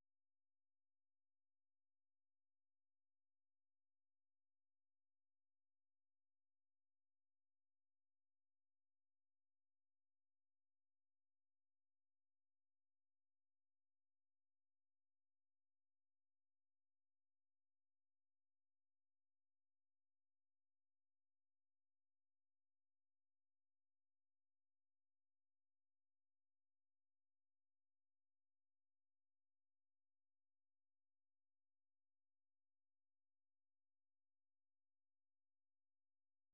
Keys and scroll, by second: 0.1-1.4 typing, 2.6 super+2, 5.0 ctrl+c, 6.0 super+1, 6.6 ctrl+v, 7.3 Return, 10.6-11.4 typing, 14.0-17.7 typing, 23.4 super+2, 25.8 alt+9, 30.9-33.3 typing.